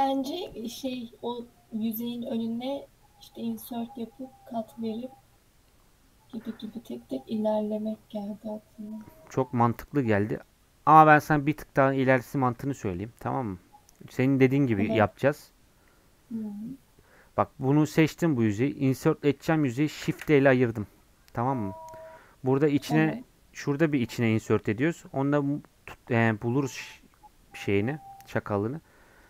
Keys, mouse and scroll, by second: 10.4-12.0 drag, 12.0 Tab, 12.8 click, 15.5 click, 20.0 shift+d.